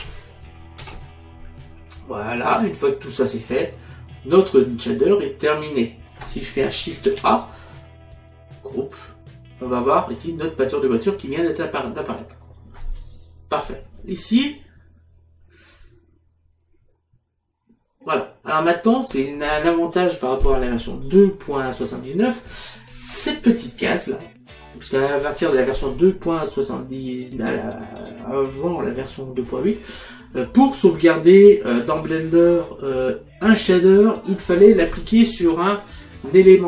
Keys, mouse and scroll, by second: 0.9 Return, 0.9 KP_Enter, 3.8 middle click, 7.1 shift+a, 12.2 click.